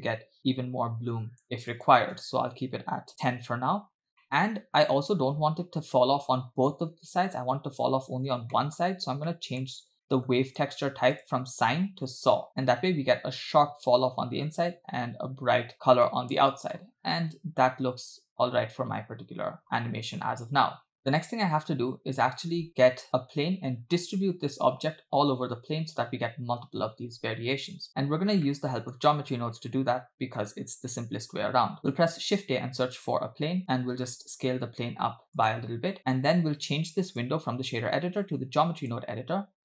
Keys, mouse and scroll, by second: 1.7-3.1 drag, 4.2 middle click, 4.9 middle click, 8.6 middle click, 8.9-9.3 scroll up 3, 9.3 middle click, 10.1 middle click, 10.5 click, 11.2-12.5 drag, 15.7-16.1 scroll down 2, 16.1 middle click, 16.7-17.4 middle drag, 17.4 space, 21.0 scroll down 6, 23.2-24.2 scroll down 2, 28.5-29.0 middle drag, 31.0 shift+a, 33.8 s, 35.7 scroll down 2, 37.1-39.0 drag.